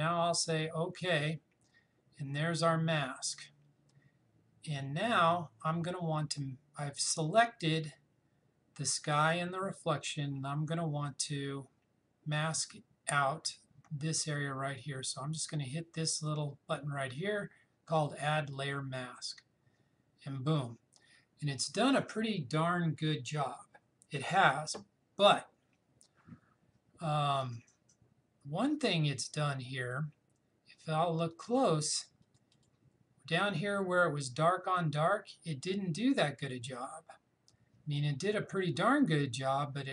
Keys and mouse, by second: 18.5 click, 31.3 click, 36.4 click.